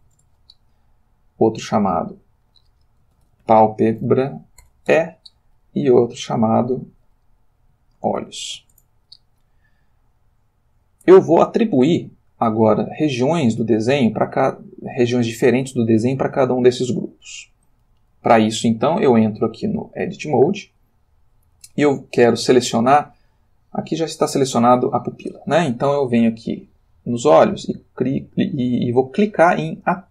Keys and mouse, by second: 0.1 Return, 1.7 click, 3.1-4.6 typing, 4.9 shift+Return, 6.5 click, 8.0-8.5 typing, 8.7 shift+Return, 10.2-11.5 shift+middle drag, 16.9 ctrl+middle click, 18.8 click, 20.1 click, 21.8 ctrl+middle click, 23.8-25.0 drag.